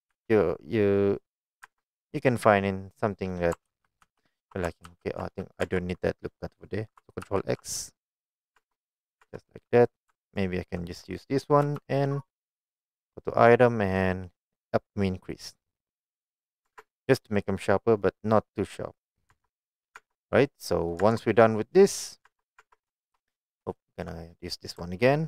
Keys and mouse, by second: 0.2 s, 1.5 click, 1.7 Tab, 2.2-3.4 middle drag, 3.8 ctrl+z, 4.1 ctrl+z, 5.0 ctrl+z, 5.4 middle click, 5.7 Tab, 7.4 ctrl+x, 8.1 middle click, 8.7 Tab, 8.9 middle click, 9.3 Tab, 11.7 n, 13.5 click, 14.8-16.3 drag, 17.1 Tab, 17.3-17.8 middle drag, 18.1-18.7 middle drag, 19.4 Tab, 19.7 middle click, 20.1 Tab, 20.2 middle click, 21.1 Tab, 21.8 middle click, 22.3 Tab, 22.7 Tab, 23.1 shift+middle click, 23.9 shift+middle click.